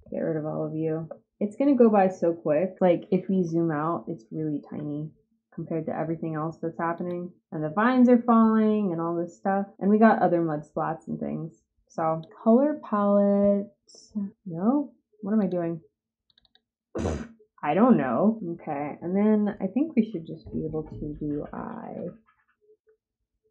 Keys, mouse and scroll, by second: 0.1 ctrl+click, 1.2-1.9 drag, 6.9 click, 9.7-12.1 drag, 15.3 click, 16.2 click, 16.4 click.